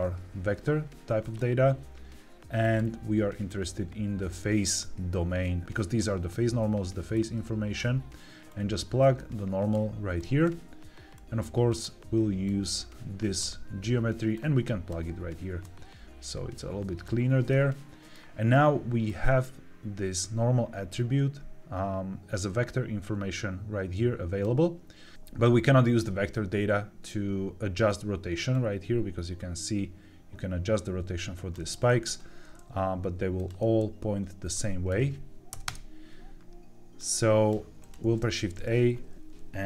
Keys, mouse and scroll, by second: 2.5-5.6 drag, 7.0 click, 8.4-9.6 drag, 10.3 click, 11.0 click, 12.4-13.3 drag, 14.2 click, 15.5-17.0 drag, 17.4 middle click, 19.0-25.1 drag, 28.4-31.4 drag, 31.8 ctrl+z, 33.3 click, 33.5 ctrl+z, 34.4-35.6 drag, 36.9 click, 37.7 click, 37.9 shift+a.